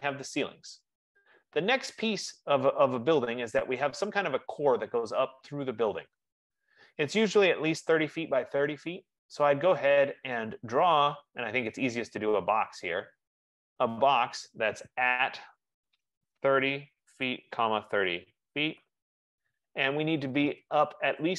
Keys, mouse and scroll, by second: 11.2 click, 13.8 click, 16.0-19.2 typing, 16.6-20.8 drag.